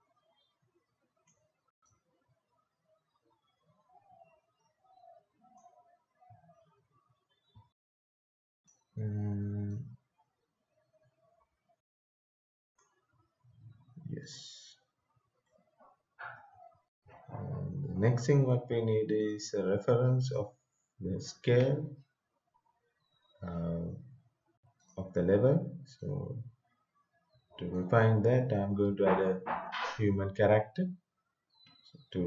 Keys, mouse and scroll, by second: 8.6-14.3 drag, 15.5 right click, 16.1-17.8 typing, 19.2 click, 24.8-29.7 drag.